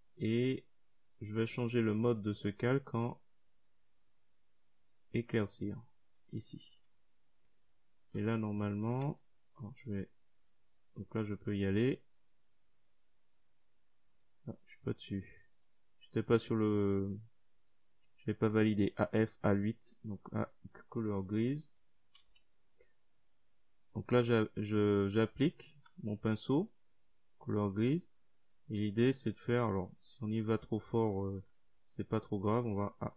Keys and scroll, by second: 20.2 Delete, 32.0 ctrl+z.